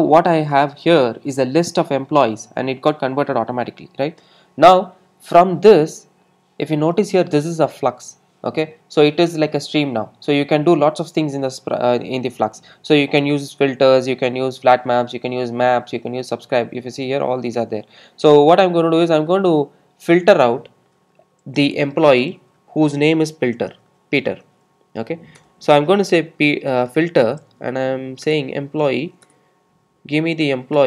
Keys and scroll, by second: 25.5 Return.